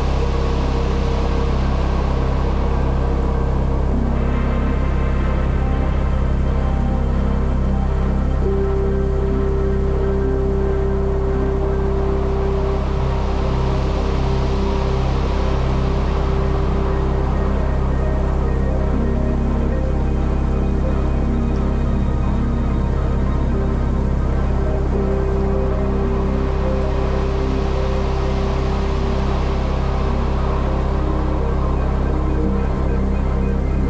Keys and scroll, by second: 27.5 ctrl+l, 30.1 ctrl+z.